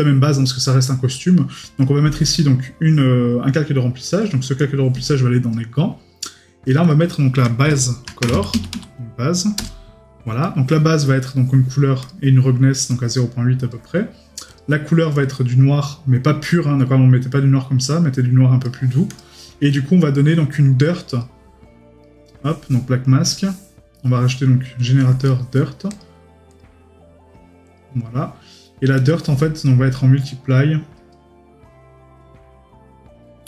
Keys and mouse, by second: 10.4 right click, 22.0 right click, 23.9 right click, 25.3 right click.